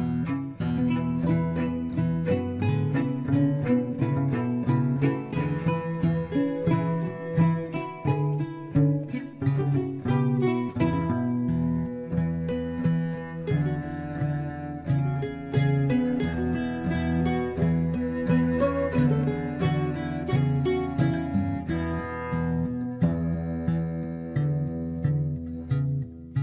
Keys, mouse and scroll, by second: 12.9 click, 13.4-13.8 scroll down 2, 13.8-16.8 middle drag, 17.1-18.4 scroll up 2, 18.4-19.3 scroll up 1, 19.3 click, 21.4-24.5 drag.